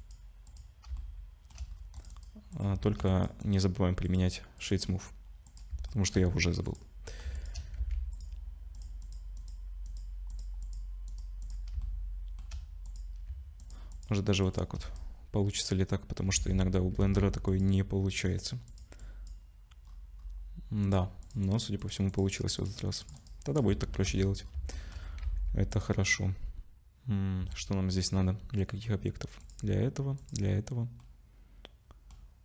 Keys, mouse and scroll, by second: 0.4 click, 0.9 shift+middle click, 1.7 scroll up 2, 1.9 click, 2.1 right click, 3.1 click, 3.4 right click, 4.6 click, 4.7 right click, 5.9 shift+middle click, 6.6 click, 7.3 shift+click, 7.7 ctrl+c, 10.3 click, 10.6 click, 11.1 right click, 11.8 shift+middle click, 12.8 click, 13.6 shift+click, 13.9 click, 14.7 shift+click, 14.8 right click, 16.3 ctrl+c, 17.0 ctrl+c, 19.8-20.8 scroll up 4, 20.8 click, 20.8 scroll up 2, 21.2 click, 21.4 right click, 22.1 click, 22.3 right click, 23.0 click, 23.1 right click, 23.8-24.7 shift+scroll down 12, 24.7 shift+middle click, 25.2 ctrl+s, 25.7 click, 27.6 shift+middle click, 29.4 shift+click, 30.2 shift+click, 31.0 shift+middle click.